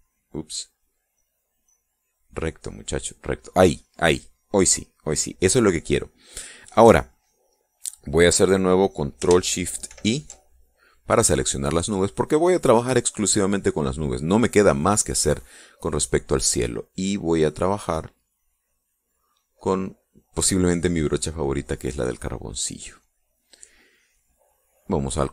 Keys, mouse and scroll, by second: 1.3-2.9 drag, 10.5 ctrl+shift+i, 16.7-18.1 drag, 18.5 click, 19.1 click, 20.1 click, 23.5 click.